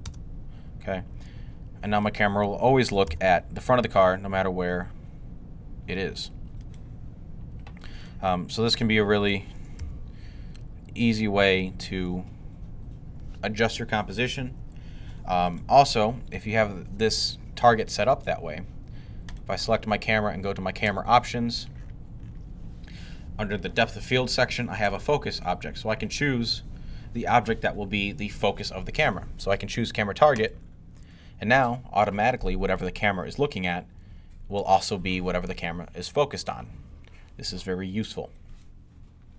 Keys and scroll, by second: 2.9 g, 9.6 g.